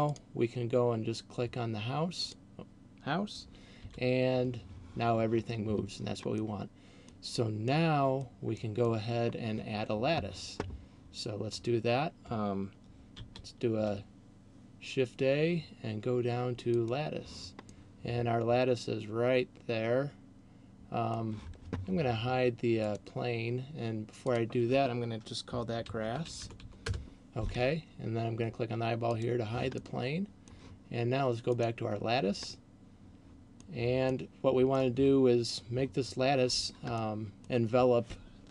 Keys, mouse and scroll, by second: 0.0 right click, 2.5 right click, 3.8 g, 6.5 middle click, 7.5 middle click, 8.5 middle click, 13.3 shift+a, 17.8 middle click, 23.0 click, 24.3 click, 29.0 click, 29.8 middle click, 31.8 right click, 32.8 middle click, 33.8 middle click, 37.0 middle click.